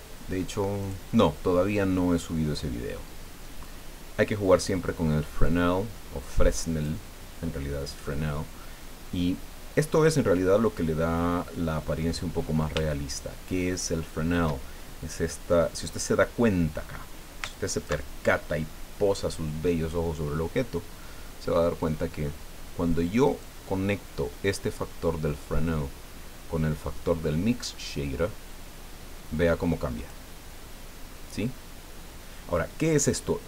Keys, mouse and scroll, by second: 0.8 click, 1.8 click, 5.4-7.0 drag, 10.8-12.0 middle drag, 12.2 scroll up 1, 12.9-14.6 shift+middle drag, 17.5 ctrl+click, 23.4-30.3 drag.